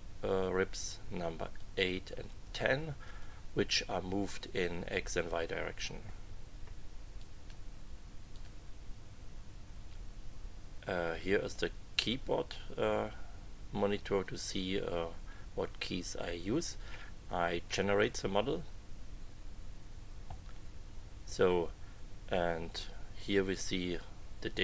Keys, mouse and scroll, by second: 1.5-2.6 drag, 3.0 click, 7.2 click, 8.3 click, 11.3 click, 17.6 click, 24.5 click.